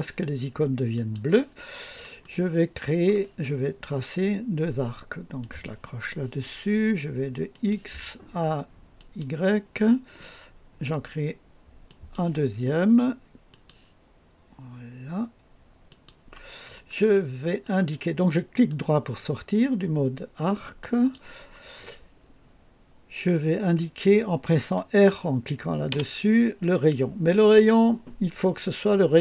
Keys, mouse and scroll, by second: 0.9 click, 1.7 scroll down 2, 2.2 right click, 5.4 click, 7.5 click, 9.0 click, 11.9 click, 13.5 click, 15.9 click, 16.5-17.0 scroll down 2, 17.2 right click, 18.5 right click, 20.8 click, 25.9 r.